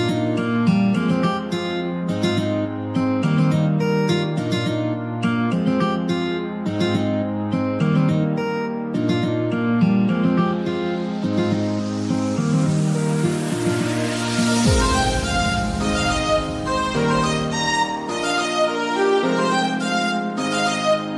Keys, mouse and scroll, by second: 1.2 click, 1.5 alt+click, 2.6 e, 4.1 scroll down 3, 4.4-6.0 shift+middle drag, 6.0 click, 6.5 alt+click, 7.2 e, 8.0 s, 9.1-10.8 middle drag, 10.8-11.7 scroll up 1, 11.7 click, 12.0 alt+click, 12.6 g, 14.0 g, 15.3 click, 15.7 alt+click, 16.4 g, 17.8 Tab, 18.2 scroll down 3, 18.4-19.2 middle drag, 19.2 click, 19.7 Tab, 20.0-21.1 middle drag.